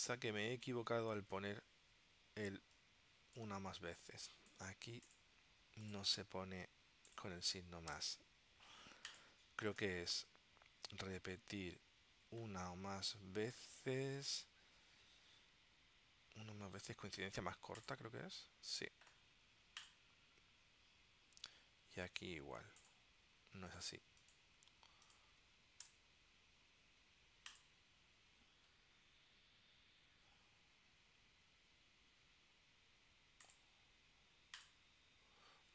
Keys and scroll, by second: 8.0 BackSpace, 26.0 BackSpace.